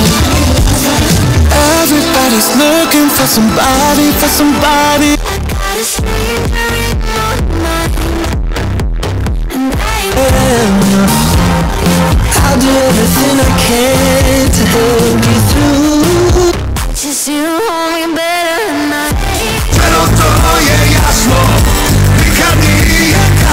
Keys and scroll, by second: 5.8 Page_Down, 16.5 Page_Down.